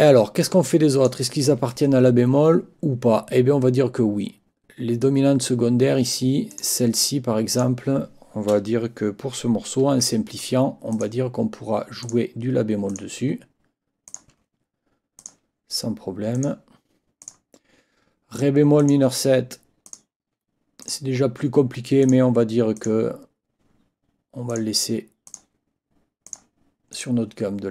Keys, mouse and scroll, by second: 0.6 click, 6.5 click, 7.5 click, 10.0 F8, 10.9 click, 12.0 click, 12.9 click, 13.2 F8, 14.1 click, 14.3 F8, 15.2 click, 16.3 click, 17.2 click, 18.8 click, 19.8 click, 20.8 click, 22.0 click, 22.8 click, 24.5 click, 25.2 click, 26.2 click, 26.9 click, 27.3 F8.